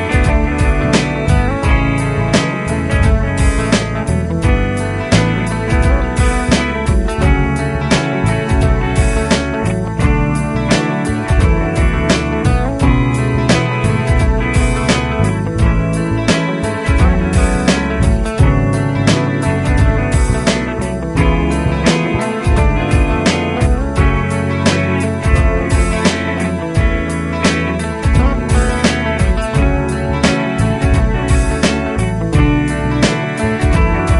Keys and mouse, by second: 0.6 shift+click, 3.4 shift+click, 10.9 Down, 11.1 Down, 12.5 Down, 13.7 Up, 16.2 shift+click, 17.1 Up, 18.8 ctrl+Right, 22.1 ctrl+Right, 22.6 ctrl+Right, 22.7 ctrl+Right, 23.0 ctrl+Right, 23.2 ctrl+Right, 25.9 ctrl+Right, 31.2 right click, 32.0 F12.